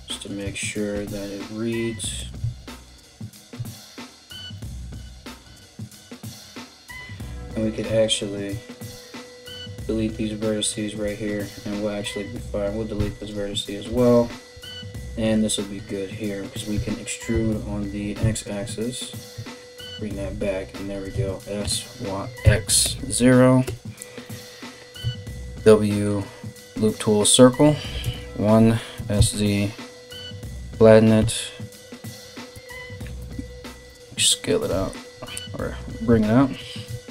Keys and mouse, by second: 0.5 alt+s, 2.0 Tab, 3.1 Tab, 5.1 1, 5.6 right click, 7.2 right click, 7.8 ctrl+right click, 8.4 x, 10.9-37.1 middle drag, 10.9 right click, 11.9 right click, 12.5 x, 13.6 right click, 14.2 right click, 16.3 e, 19.8 KP_7, 20.7 s, 23.2 \, 23.9 Return, 24.6 w, 28.5 KP_1, 28.5 s, 30.8 e, 34.2 KP_7, 35.2 alt+right click, 35.7 alt+right click, 36.2 g.